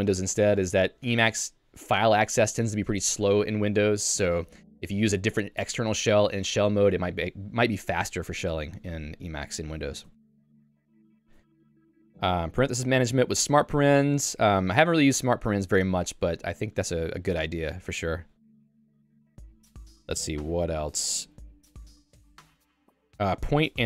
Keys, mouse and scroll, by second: 8.5 Escape, 8.9 j, 10.0 k, 10.4 j, 10.8 Tab, 11.2 j, 17.5 ctrl+d, 18.3 k.